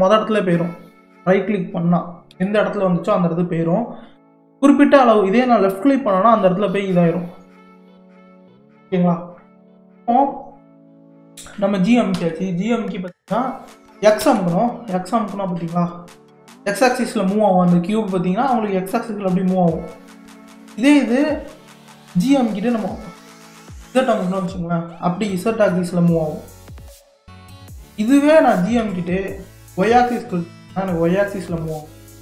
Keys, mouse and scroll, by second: 2.3 g, 8.3 ctrl+z, 12.1 g.